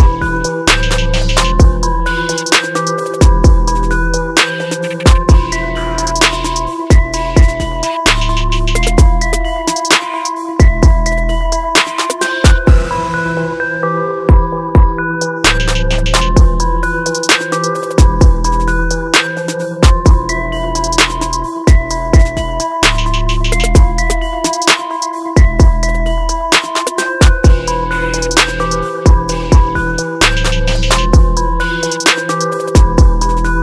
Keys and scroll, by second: 6.2 ctrl+t, 12.5 ctrl+t.